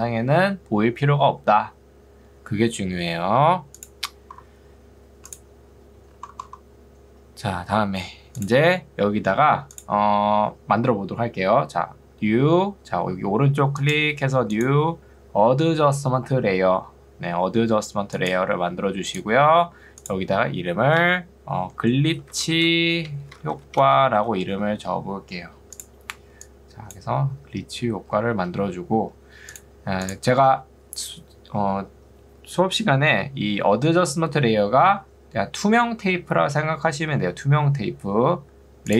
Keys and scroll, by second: 21.1 Return, 21.5-24.8 typing, 26.3 ctrl+2, 29.1 Escape.